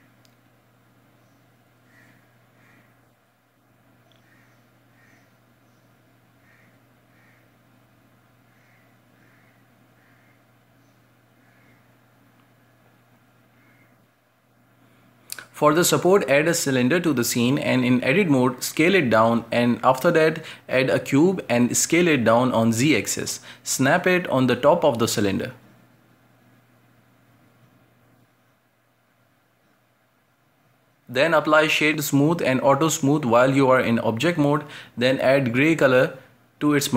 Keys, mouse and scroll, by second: 0.5-0.9 scroll down 1, 1.1-2.2 shift+middle drag, 2.2 a, 2.4 a, 2.8-4.7 middle drag, 4.7 scroll up 1, 4.9-5.3 shift+middle drag, 5.3 scroll up 1, 6.2 right click, 8.3 drag, 9.2 shift+click, 9.8-10.5 middle drag, 10.5 scroll down 1, 10.7-11.5 shift+middle drag, 11.5 shift+a, 13.2 Tab, 13.5 s, 14.1 shift+middle click, 14.5-14.8 scroll up 2, 14.8 middle click, 15.1 Tab, 15.2 g, 15.7 g, 16.2 right drag, 16.4 scroll down 2, 16.5 shift+middle click, 16.7 scroll up 2, 17.2 g, 17.7 middle click, 18.5 scroll up 2, 18.7 shift+middle click, 19.0 g, 19.4 right click, 19.5 shift+middle click, 20.0 scroll up 1, 20.0 Tab, 20.9 right click, 21.1 alt+shift+right click, 21.4 shift+s, 22.2 middle click, 22.5-25.7 typing, 23.1 scroll down 3, 23.8 middle click, 24.2 middle click, 24.4 scroll up 2, 24.8 shift+middle click, 25.2 scroll up 1, 27.1 middle click, 27.5 scroll up 1, 27.5 s, 28.5 shift+Tab, 29.0 g, 29.3 middle click, 29.5 Tab, 29.9 right click, 30.0 g, 30.6 g, 31.0 middle click, 31.5-32.8 right drag, 32.8 w, 34.2-35.0 drag, 35.2 click, 35.4 scroll down 3, 35.5-36.0 shift+middle drag, 36.0-36.7 drag.